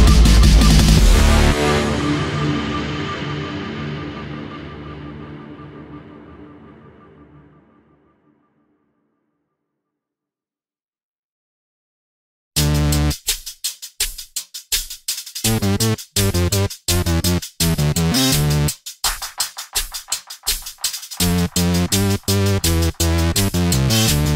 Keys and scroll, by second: 2.4 p.